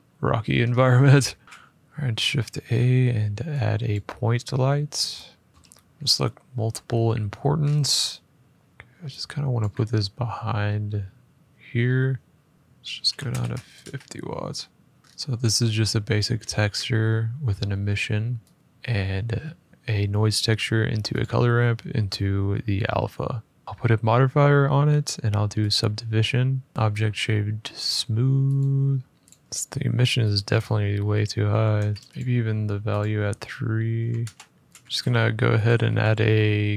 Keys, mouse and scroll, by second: 0.0 shift+middle click, 0.4-0.8 scroll up 2, 1.0 middle click, 1.2 middle click, 1.3 middle click, 1.4 a, 3.7 click, 4.3 middle click, 5.5 click, 5.5 middle click, 7.3 middle click, 7.4 middle click, 7.4 middle click, 7.5-7.9 scroll, 8.4-9.3 scroll, 9.3 click, 12.8 typing, 13.5 Return, 15.0-15.7 scroll, 15.7-16.1 scroll, 16.1 middle click, 16.1 middle click, 16.2 middle click, 16.5 middle click, 16.9 middle click, 18.3 click, 20.3 click, 20.9 click, 25.4 click, 26.7 Tab, 26.7 click, 29.1 click, 30.1 click, 31.2-31.7 typing, 32.0 click, 32.7 click, 33.7-35.6 typing, 34.7-35.4 scroll, 35.4 click.